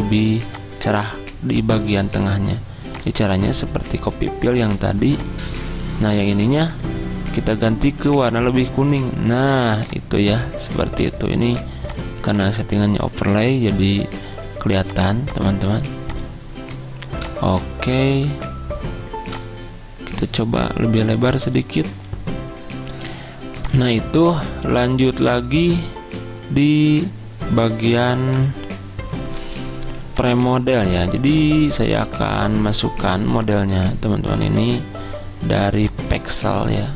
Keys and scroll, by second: 28.3 ctrl+g, 29.5 F10.